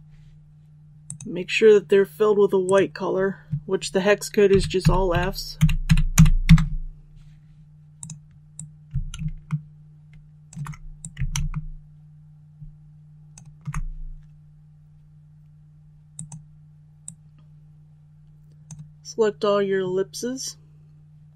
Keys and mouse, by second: 1.0-3.6 drag, 4.4-6.1 typing, 7.9-21.3 drag.